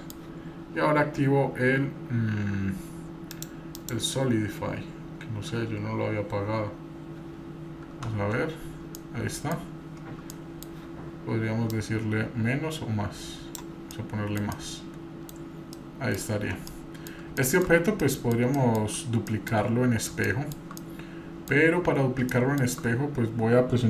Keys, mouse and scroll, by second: 3.3 click, 3.7 click, 6.3 scroll down 2, 7.0-7.9 scroll up 3, 8.1 Tab, 9.0 middle click, 9.8 scroll up 2, 10.4 middle click, 11.7-13.6 drag, 14.0-14.4 middle drag, 14.5-15.3 middle drag, 15.3-17.1 scroll down 4, 15.8-16.2 middle drag, 16.7-17.1 middle drag, 17.4 shift+middle drag, 17.6-18.0 scroll down 2, 18.0 middle click, 18.5-18.9 shift+middle drag, 19.3 middle click, 19.6-20.1 scroll up 1, 20.3 shift+middle click, 20.8 middle click, 22.3-22.7 shift+middle drag.